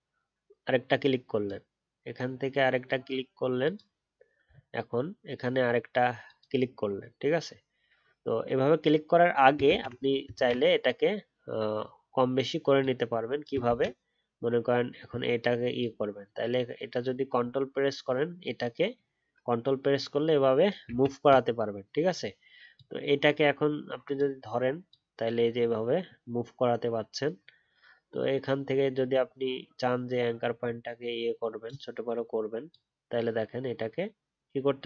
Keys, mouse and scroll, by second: 4.4-7.7 alt+scroll up 2, 10.3 ctrl+z, 13.6 ctrl+z, 15.7 ctrl+click, 20.8 ctrl+z.